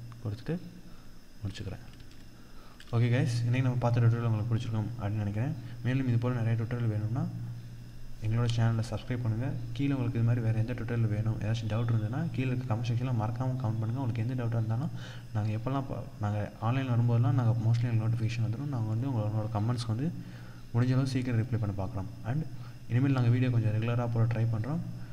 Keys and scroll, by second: 1.3 ctrl+0.